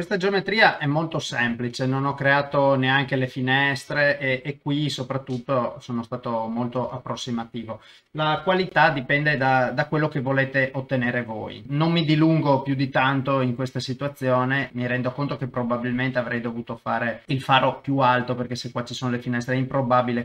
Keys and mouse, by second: 0.2-2.2 middle drag, 2.5 KP_0, 4.6-6.2 middle drag, 6.9 KP_0, 8.6 alt+z, 10.1-11.2 middle drag, 11.9 click, 11.9 KP_0, 14.4 click, 14.7-15.8 middle drag, 16.6 KP_0.